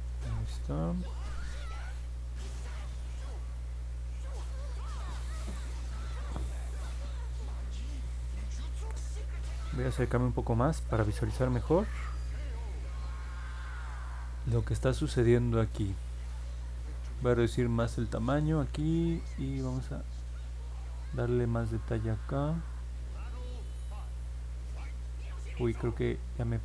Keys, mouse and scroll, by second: 3.0 click, 8.9 middle click, 9.1-9.5 scroll down 2, 10.2 alt+middle click, 11.3 middle click, 11.5 middle click, 20.1-26.6 drag.